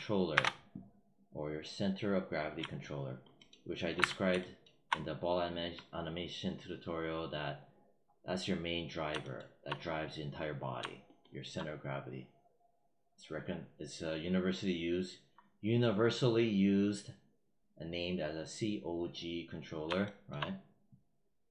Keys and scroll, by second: 0.2 ctrl+v, 3.8 w.